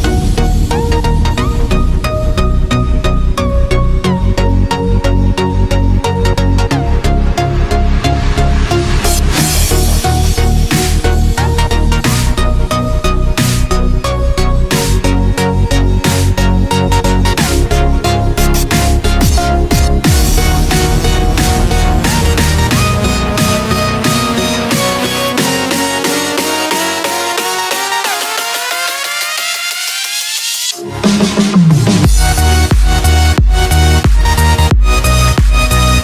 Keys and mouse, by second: 3.8-5.2 middle drag, 6.2 g, 9.9 g, 13.2-14.9 middle drag, 15.6-18.2 middle drag, 18.7-20.0 middle drag, 20.8 click, 21.7 s, 23.8 click, 24.3-27.3 middle drag, 28.1 click, 33.9 click, 34.2 click.